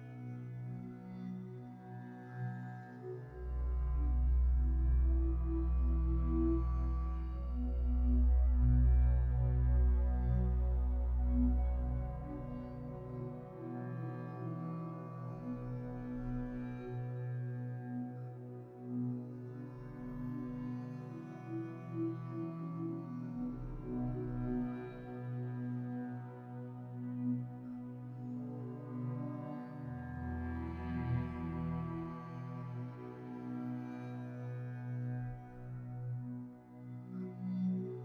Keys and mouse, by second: 10.1 3, 11.6-13.0 shift+drag, 13.2 shift+click, 16.2 x, 20.0 ctrl+s, 24.1 ctrl+r, 25.7 shift+middle click, 28.6 shift+a, 30.7 Tab, 32.5 click, 34.9 click, 36.0 s, 37.3 ctrl+z.